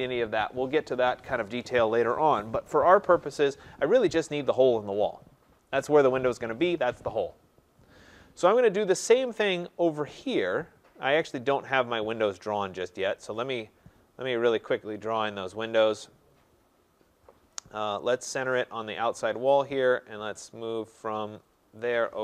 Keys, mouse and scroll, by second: 8.8-9.4 scroll, 9.4-11.2 scroll, 11.2-13.1 scroll, 13.1 click, 13.6 scroll, 13.8 middle click.